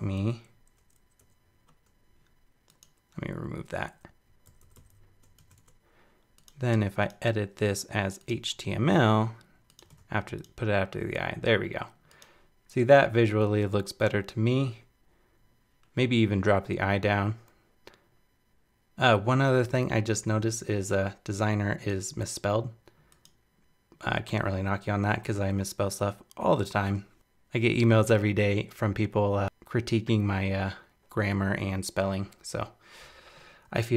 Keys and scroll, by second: 5.4 super+c, 9.9 super+v.